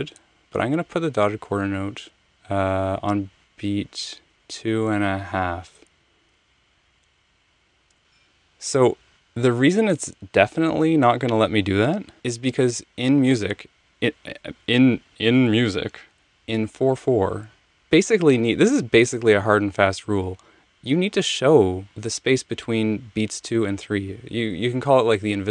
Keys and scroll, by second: 0.6 Tab, 0.9 Tab, 4.2 Tab, 6.5 f, 7.9 Return.